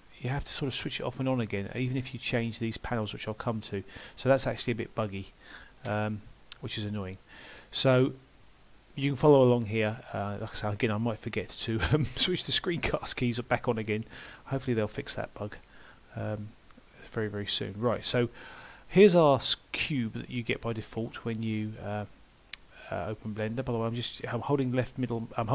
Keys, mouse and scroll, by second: 0.0-1.7 scroll down 1, 1.7 middle click, 7.6 middle click, 20.0 shift+middle click, 21.1 middle click.